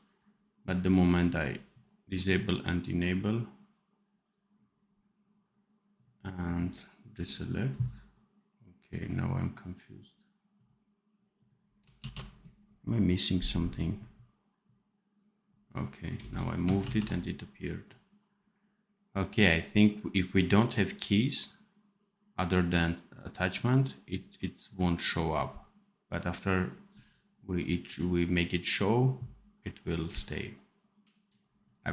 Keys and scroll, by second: 12.0 ctrl+s, 16.7 ctrl+z.